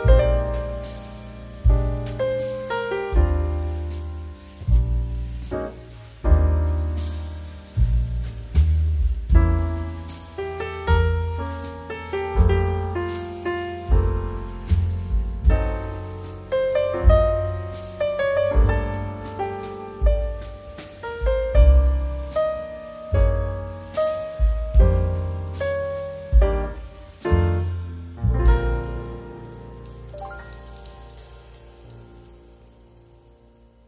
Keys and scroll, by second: 11.7 space.